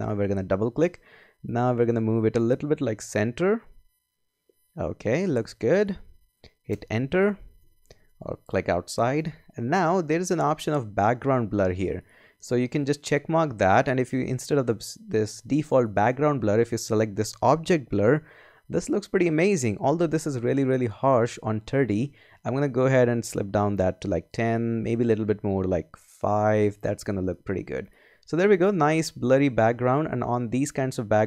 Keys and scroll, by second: 7.6 Return.